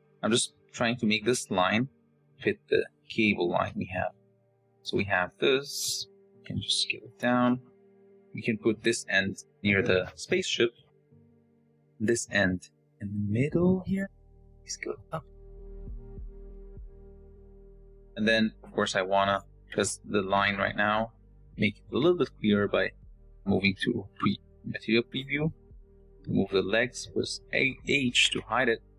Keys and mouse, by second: 2.0 g, 2.9 s, 3.6 r, 4.4 g, 8.0 click, 8.8 r, 9.2 s, 11.3 s, 12.0 r, 13.1 s, 14.4 click, 15.0 click, 15.4 g, 16.5 s, 19.6 g, 21.9 Tab, 24.2 z, 25.4 click, 28.0 h, 28.7 click.